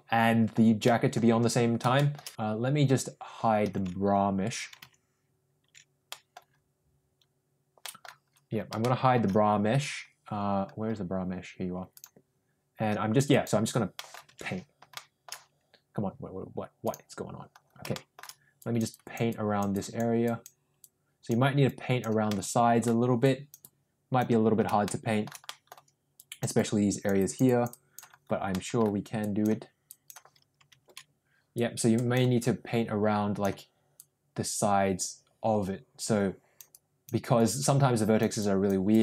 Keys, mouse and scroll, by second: 0.8 middle click, 1.9 shift+middle click, 3.9 ctrl+z, 6.0 middle click, 7.7 middle click, 8.7 shift+middle click, 11.8 click, 13.2 click, 13.9 middle click, 14.5 ctrl+z, 14.9 middle click, 16.8 click, 17.9 middle click, 18.6 click, 18.9 click, 19.3 click, 19.7 click, 20.2 click, 20.8 click, 21.6 click, 22.2 middle click, 23.2 click, 23.6 click, 24.8 shift+middle click, 25.4 middle click, 26.1 click, 26.5 click, 27.2 click, 27.4 click, 28.5 middle click, 29.2 click, 29.9 click, 31.0 ctrl+z, 31.5 click, 32.4-33.4 drag, 33.9-36.6 drag, 36.7 click, 37.4 click, 38.4 click, 38.9 click.